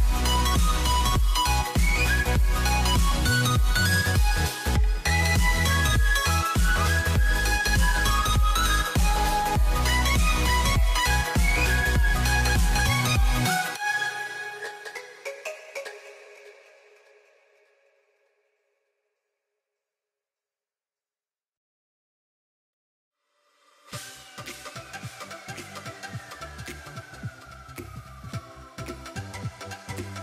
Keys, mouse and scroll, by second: 0.5-1.4 middle drag, 1.5-2.0 middle drag, 4.1 middle click, 4.4 scroll down 2, 4.5-6.0 middle drag, 7.0 middle click, 7.3-7.8 scroll up 6, 8.2 click, 8.8-10.0 drag, 10.3 scroll down 2, 10.5 middle click, 11.0 scroll down 1, 11.0 middle click, 11.6 click, 12.2 click, 12.4 click, 12.6 click, 12.9 click, 13.2 scroll down 3, 13.3 middle drag, 13.5 a, 13.6 a, 13.8 scroll up 5, 13.9 middle click, 14.2 click, 14.4 middle click, 14.6 a, 14.7 a, 14.8 middle click, 15.1 click, 15.3 scroll down 2, 15.4 middle click, 15.6 Tab, 15.8-16.9 middle drag, 16.9 z, 17.2 c, 23.0 c, 23.8 c, 27.0 middle click, 27.9 z, 28.4 scroll up 2, 28.5 middle click, 29.3 scroll up 1, 29.5-30.2 middle drag.